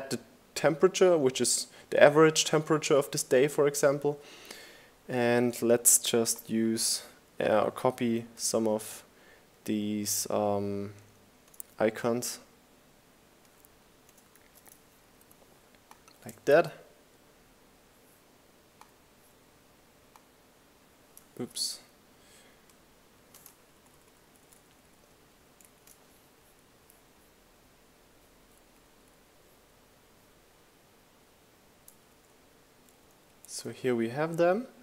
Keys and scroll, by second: 12.1 super+c, 14.5 super+v, 19.0 super+z, 21.3 shift+Down, 21.5 shift+Right, 22.1 shift+Down, 22.3 shift+Right, 22.8 shift+Down, 23.9 shift+Right, 30.0 shift+Down.